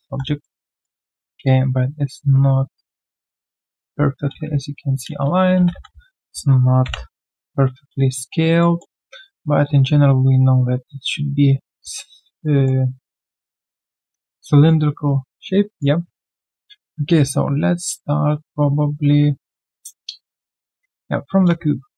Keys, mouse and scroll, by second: 0.4 alt+middle click, 0.7 alt+right click, 4.3 alt+right click, 4.6 alt+click, 5.1 alt+click, 5.8 f, 7.7 alt+right click, 8.1 alt+middle click, 9.3-9.9 alt+scroll down 1, 11.7 alt+scroll, 12.0 alt+right click, 12.4 alt+middle click, 16.0-16.6 alt+scroll down 1, 16.6 alt+right click, 17.0 q, 21.6 shift+right click.